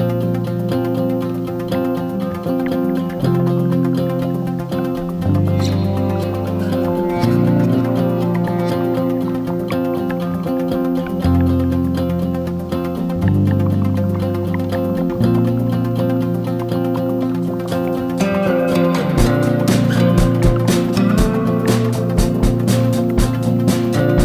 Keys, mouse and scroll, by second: 3.2-3.7 ctrl+scroll, 4.8-7.6 drag, 9.2 ctrl+g, 12.0 click, 14.1-14.6 ctrl+scroll, 16.5 ctrl+g, 17.0-21.1 drag, 22.6 ctrl+scroll, 23.8-24.2 drag.